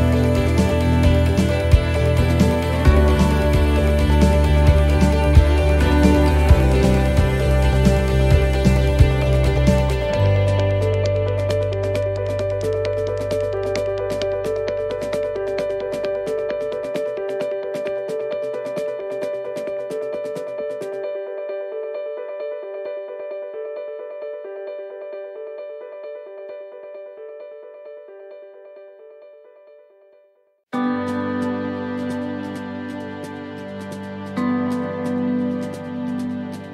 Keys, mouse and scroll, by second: 2.6 shift+middle click, 4.3 shift+middle click, 5.4 c, 7.3-7.9 scroll down 1, 7.9 scroll down 1, 8.0 shift+middle click, 9.0 c, 10.5 shift+middle click, 11.4-11.9 scroll up 2, 12.0 shift+middle click, 13.4 c, 17.2 shift+middle click, 18.9 shift+middle click, 20.3 e, 22.2 click, 25.3 shift+middle click, 27.4 right click, 29.1 ctrl+z, 30.4 c, 32.9 e, 34.3 click.